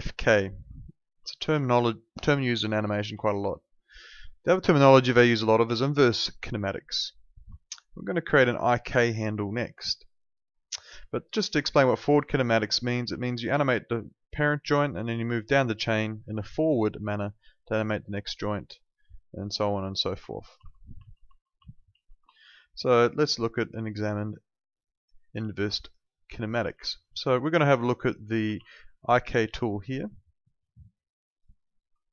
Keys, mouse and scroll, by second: 0.9 ctrl+z, 7.6 alt+click, 10.1 alt+click, 12.1 click, 20.2 alt+click, 20.7 ctrl+z, 22.3 alt+middle click, 22.6 alt+click, 23.0 alt+right click, 23.3 alt+middle click, 23.5 alt+right click, 23.8 alt+click, 26.8 alt+click, 28.4 ctrl+2.